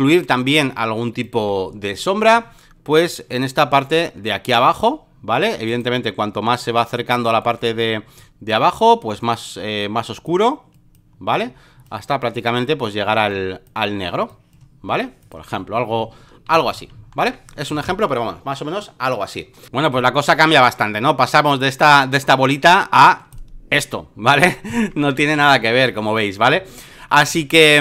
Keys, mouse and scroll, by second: 1.2-5.6 drag, 5.6-7.1 right drag, 7.1-15.7 drag, 15.9 ctrl+d, 16.5 v, 17.6 v, 19.6-21.9 drag, 22.6-24.3 drag, 25.3 v, 25.9 ctrl+right click, 26.6 alt+middle click, 27.3 space, 27.4 click.